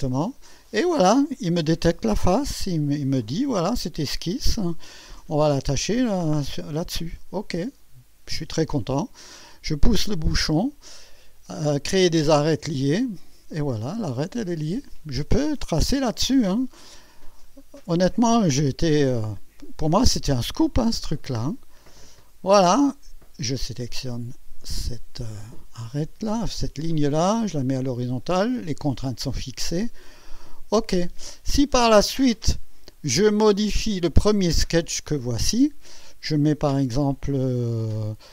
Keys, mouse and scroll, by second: 0.1 click, 7.2 click, 12.0 click, 13.8 click, 17.4 click, 19.6 click, 22.2 click, 22.9 right click, 24.9 click, 27.4 click, 30.0 click, 34.4 click.